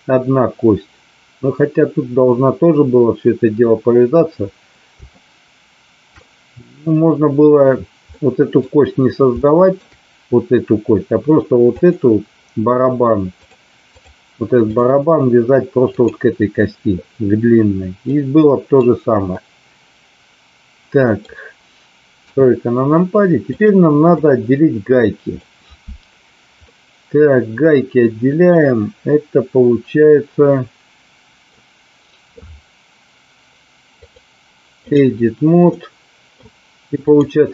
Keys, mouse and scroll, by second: 5.0-6.1 shift+middle drag, 8.1-8.5 middle drag, 9.4-9.8 shift+middle drag, 13.5 click, 14.8 click, 16.0 click, 18.1-18.8 middle drag, 19.4-21.1 middle drag, 22.1 KP_3, 23.4 click, 24.1-25.4 middle drag, 26.6-31.4 middle drag, 34.0 click, 35.6 middle click, 37.0 click.